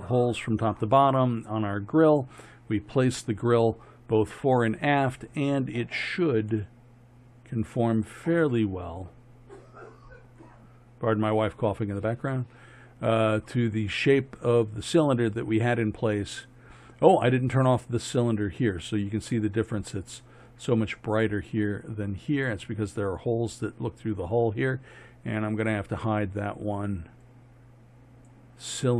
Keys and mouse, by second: 6.6-7.5 middle drag, 27.3-27.8 drag, 28.4 click.